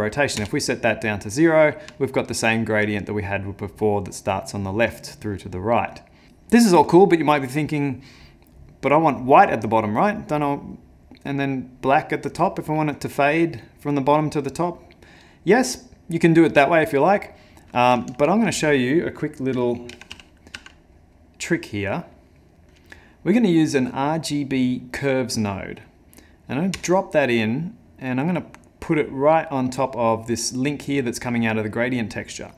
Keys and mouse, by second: 2.0 ctrl+middle click, 16.6 middle click, 17.4 middle click, 18.1 ctrl+shift+a.